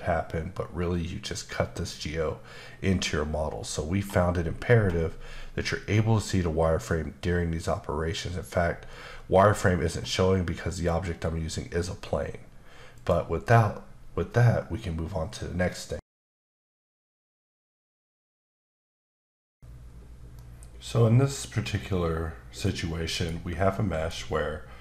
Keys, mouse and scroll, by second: 2.6-3.0 scroll down 1, 3.0-5.2 scroll up 5, 5.4 scroll up 2, 6.0-6.5 scroll up 1, 6.5-7.2 scroll down 1, 7.2-8.2 scroll down 1, 8.2-8.6 scroll down 1, 8.6-9.8 scroll up 3, 9.8-10.9 scroll up 1, 13.0 click, 23.3 Tab, 23.7 middle click, 24.2 scroll up 1.